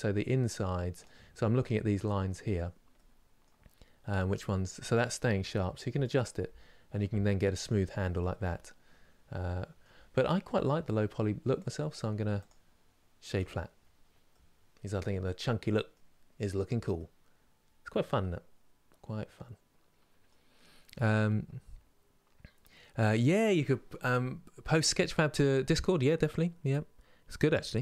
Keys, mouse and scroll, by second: 2.6 middle click, 3.6-4.1 scroll down 1, 4.1-5.8 middle drag, 5.8-7.7 drag, 7.7-11.2 middle drag, 11.2 click, 13.0 right click, 13.5 scroll down 2, 14.0-19.6 middle drag.